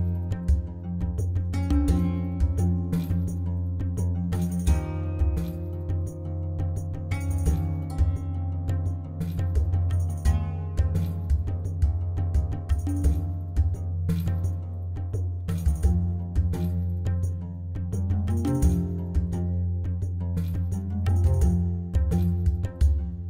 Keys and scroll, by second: 8.8 Tab, 9.3 1, 10.2 shift+z, 10.5 alt+a, 11.6 b, 13.2 shift+z, 17.8 r, 18.0 o, 18.2 f, 18.4 Return, 21.8 shift+a, 22.2 c.